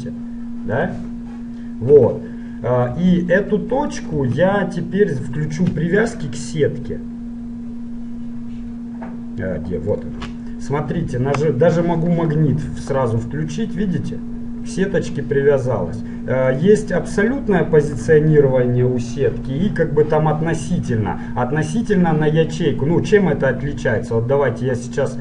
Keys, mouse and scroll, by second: 2.2 Tab, 3.2 g, 4.4 Tab, 6.2-8.2 drag, 10.6-12.1 middle drag, 12.1-14.2 drag, 13.4 g, 22.3-24.3 middle drag, 23.9 g.